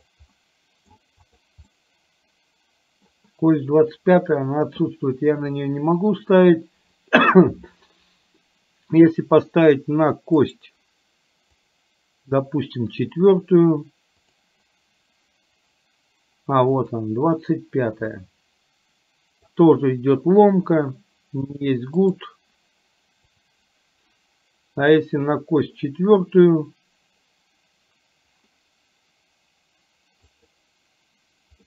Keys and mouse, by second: 1.3 click, 1.7-3.2 middle drag, 10.5-18.0 right drag, 18.2-19.5 middle drag, 22.2-31.5 right drag.